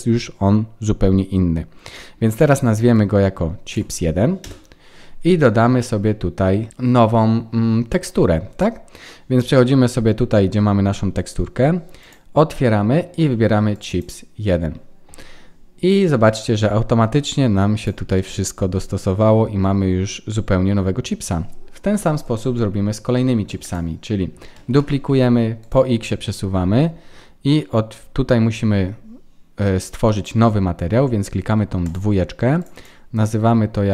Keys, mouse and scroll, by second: 2.3 click, 8.4 scroll down 1, 11.9 click, 17.7 click, 18.1 middle click, 21.8 KP_1, 22.7-23.3 scroll up 2, 23.1 shift+middle click, 23.6 click, 24.5 shift+d, 28.7-30.5 scroll up 6, 31.8 click, 32.7 click.